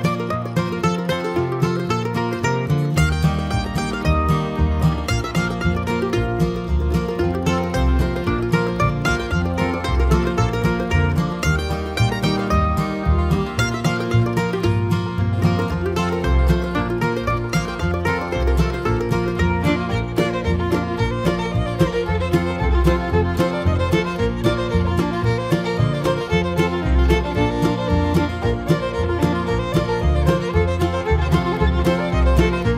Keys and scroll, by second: 32.1 Return.